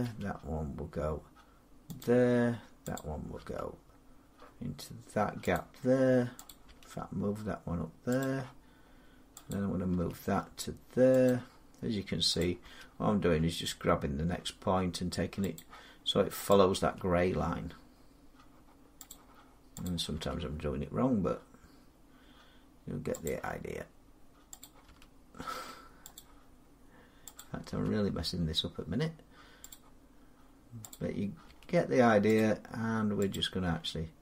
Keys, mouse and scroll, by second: 1.8 click, 3.2 click, 3.2 g, 5.4 click, 6.3 click, 6.5 g, 8.0 click, 9.7 click, 9.7 g, 11.1 click, 12.5 g, 15.4 click, 16.3 click, 16.7 g, 18.9 click, 20.0 click, 20.0 g, 23.1 click, 24.7 click, 24.7 g, 26.0 click, 27.6 g, 29.6 click, 31.0 click, 31.3 g, 32.2 click, 33.5 click, 33.5 g.